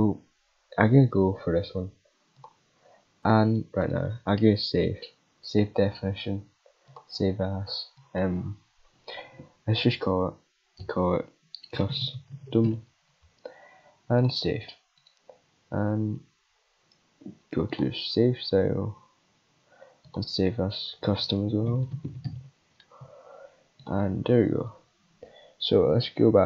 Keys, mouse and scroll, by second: 2.3 click, 3.8 right click, 6.9 click, 8.0 click, 14.2 click, 15.0-17.6 right drag, 17.6 click, 20.0 click, 21.5 c, 23.8 click.